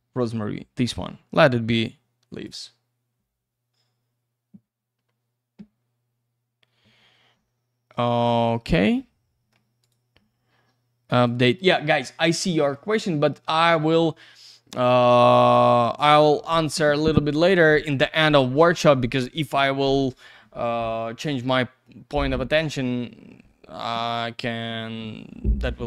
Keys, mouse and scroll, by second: 1.8 click, 8.5-9.0 scroll up 1, 9.0 middle click, 9.8 right click, 11.1 click, 17.1 middle click.